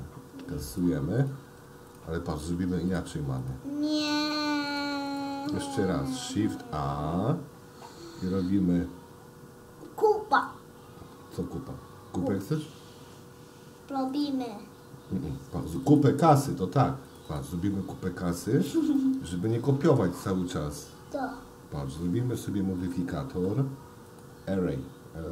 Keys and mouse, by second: 0.4 x, 1.3 click, 1.6 x, 2.4 click, 2.5 x, 3.5 click, 3.8 x, 4.8 click, 4.9 x, 6.8 shift+a, 19.0-20.2 middle drag, 24.1-25.3 drag.